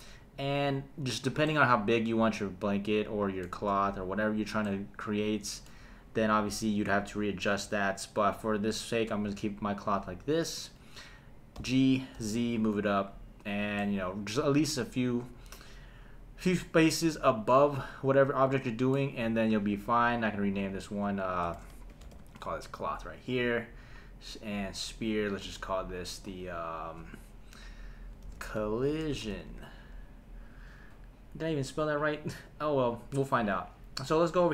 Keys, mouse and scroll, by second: 1.5-3.6 middle drag, 4.6-5.7 middle drag, 11.6 g, 12.1 z, 13.4 click, 13.8-19.0 middle drag, 20.5 click, 20.7-22.4 drag, 23.9 click, 24.9 click, 25.3 click, 27.4-29.5 drag, 28.7 l.